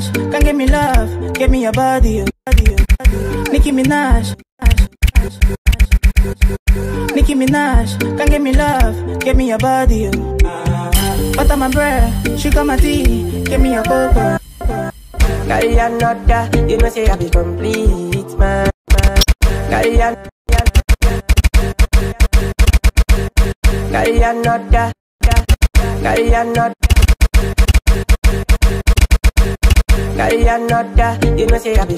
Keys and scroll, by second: 1.9-3.1 typing, 4.1-6.7 typing, 14.1 g, 18.4-30.2 typing.